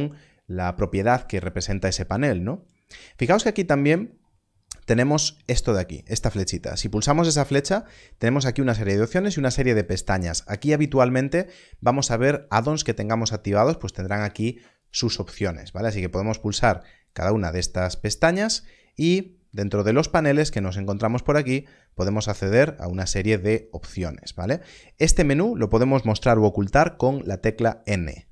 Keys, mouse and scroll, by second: 6.6 click, 9.0 click, 14.7 click, 17.0 click, 19.8 click.